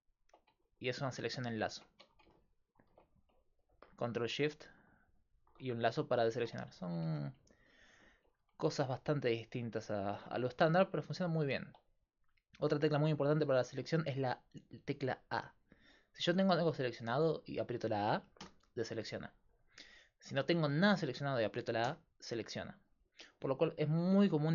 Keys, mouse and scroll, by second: 3.4-7.1 middle drag, 3.4-7.1 right drag, 7.1 a, 14.0-16.3 middle drag, 16.3-18.4 right drag, 18.4 a, 21.9 a, 23.2 middle click, 23.7-24.5 right drag.